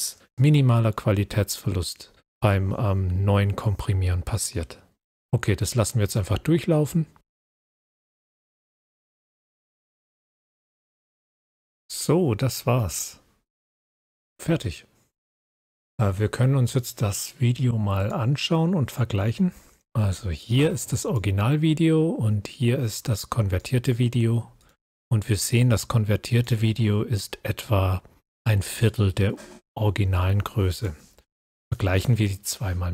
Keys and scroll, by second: 14.0 scroll up 1.